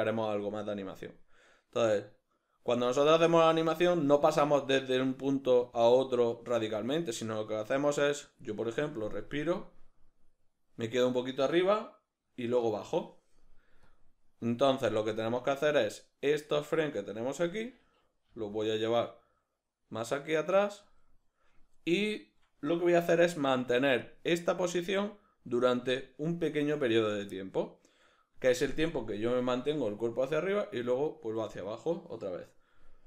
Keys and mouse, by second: 15.6 right click, 18.3 g, 21.0 click, 24.1-33.0 drag.